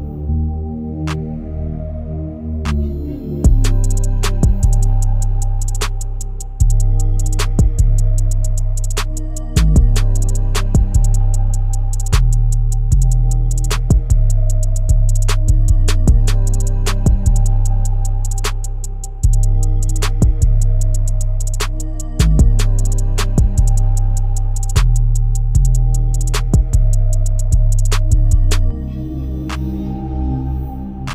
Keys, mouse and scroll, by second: 11.4 ctrl+z, 14.8-24.9 drag, 25.3-25.9 scroll down 3, 28.6-31.1 drag.